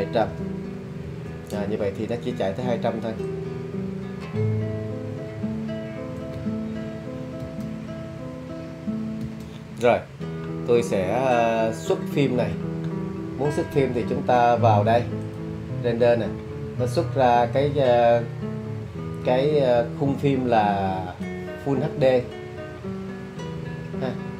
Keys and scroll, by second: 0.2 0, 0.4 0, 1.0 Return, 7.4 space, 9.2 space.